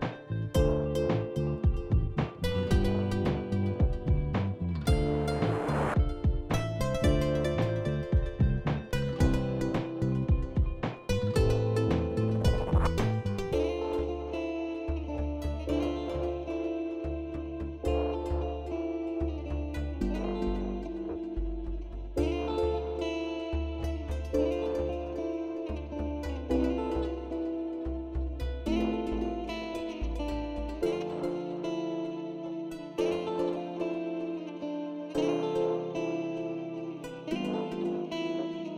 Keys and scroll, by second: 0.0-0.5 typing, 9.1-10.3 w, 33.5-34.6 w, 35.8 w, 37.6 ctrl+s, 38.2 ctrl+s.